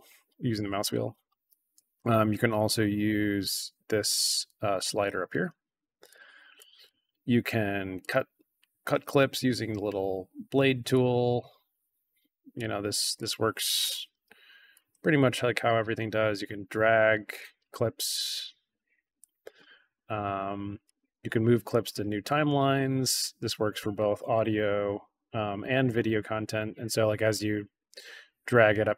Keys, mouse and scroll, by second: 0.3 alt+scroll down 2, 0.4-1.0 alt+scroll up 4, 1.0-1.5 alt+scroll down 2, 2.5-5.3 drag, 6.0 click, 6.5 drag, 7.9 click, 10.8 click, 11.2 click, 12.5 click, 13.1 click, 14.1 BackSpace, 14.7 click, 14.8 BackSpace, 15.3 click, 16.8 click, 18.3 click, 19.7 click, 20.8-22.2 drag, 22.5 middle click, 22.5 scroll up 1, 24.3-24.8 drag, 25.6-26.0 drag, 26.4 scroll up 1, 27.2-28.4 drag, 28.8 scroll up 1.